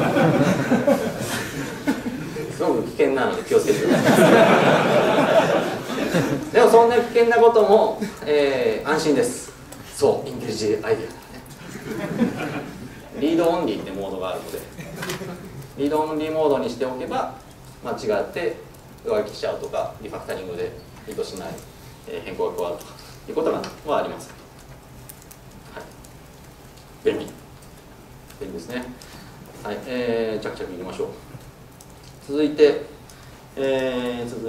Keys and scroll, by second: 16.9 F4.